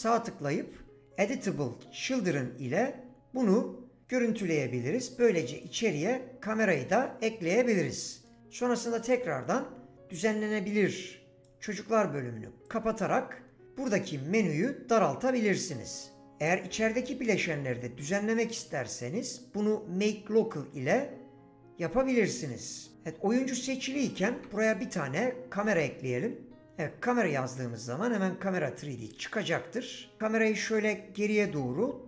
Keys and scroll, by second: 24.3 ctrl+a, 26.6 typing.